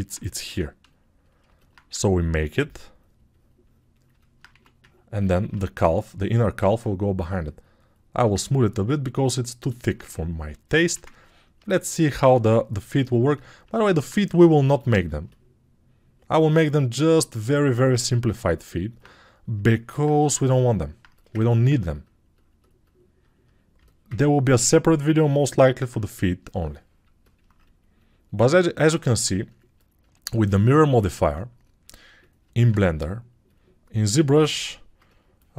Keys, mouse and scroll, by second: 8.4-11.2 ctrl+alt+drag, 8.4-11.2 ctrl+alt+middle drag, 8.4-11.2 ctrl+alt+right drag.